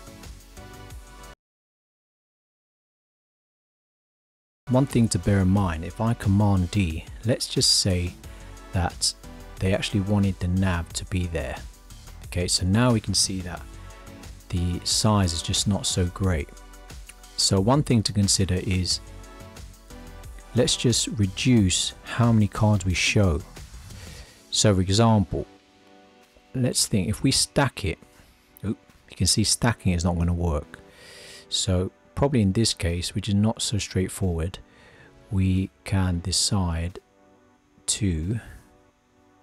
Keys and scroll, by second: 6.3 super+d, 30.2 super+z.